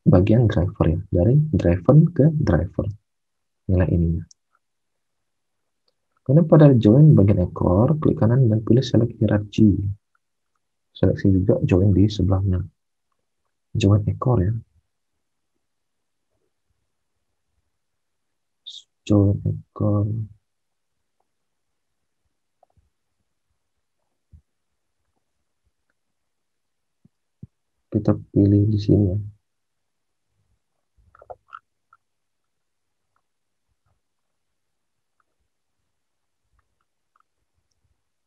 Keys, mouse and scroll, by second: 4.3 alt+Tab, 37.6 alt+Tab.